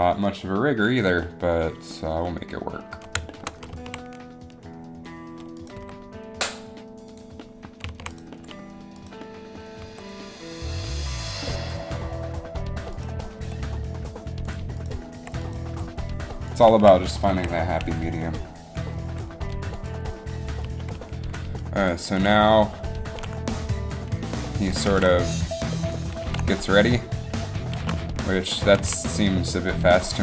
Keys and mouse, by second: 3.9 a, 5.9 g, 8.0 a, 10.0 r, 13.1 right click, 13.6 r, 15.9 r, 16.8 a, 17.4 a, 18.3 i, 22.0-23.2 drag, 23.2 alt+a, 25.2 alt+a, 26.4 alt+a, 28.0 alt+a, 29.0 a.